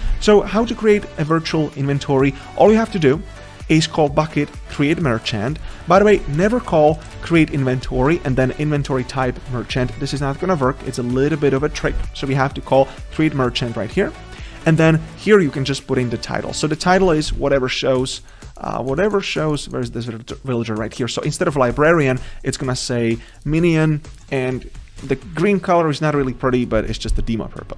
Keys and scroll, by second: 27.6 ctrl+z.